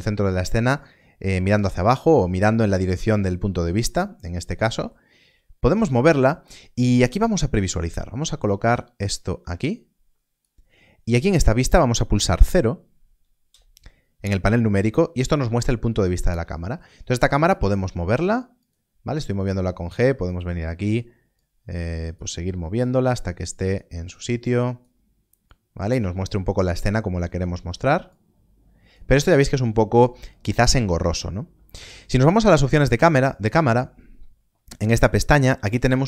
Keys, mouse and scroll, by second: 5.7 g, 5.9 click, 8.4 click, 16.0 KP_0, 16.8 middle click, 18.5 g, 18.5 click, 19.2 middle click, 20.6 click, 20.6 middle click, 22.2 click, 32.5 click.